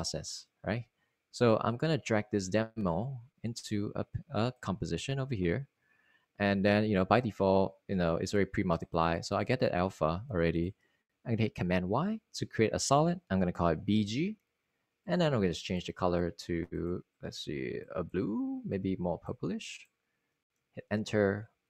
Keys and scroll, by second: 14.3 super+y, 15.9-16.9 typing.